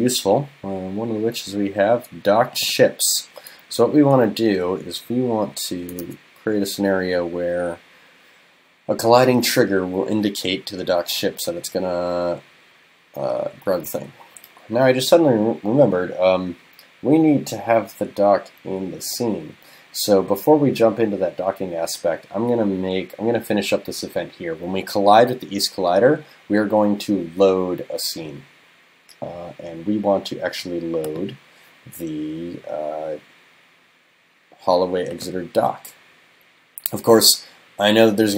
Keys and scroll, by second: 3.8 super+c, 6.1 super+f.